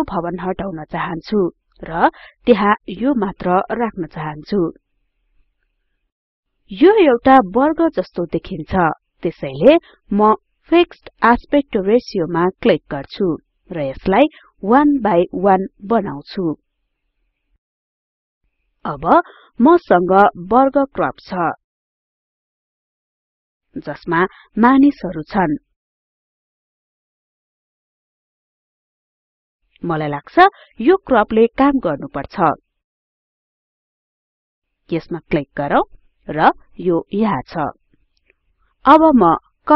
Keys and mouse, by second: 35.2 click.